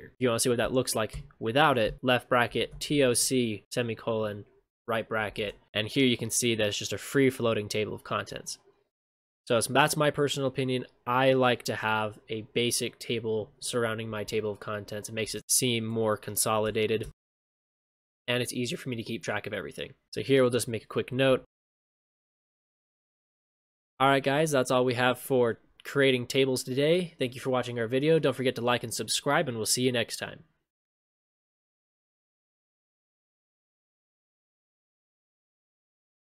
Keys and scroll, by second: 5.4 ctrl+shift+space, 15.2 ctrl+shift+space, 22.9 ctrl+shift+space.